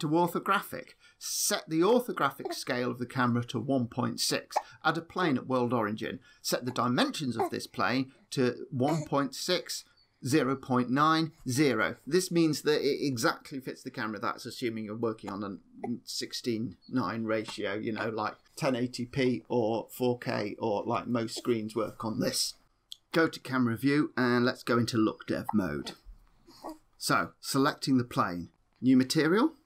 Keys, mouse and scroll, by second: 0.6 click, 2.4 click, 4.7 shift+a, 7.5 click, 8.4 ctrl+z, 22.8 KP_0, 25.4-25.7 click, 25.5 click, 27.4 click, 28.5 click, 28.9 click.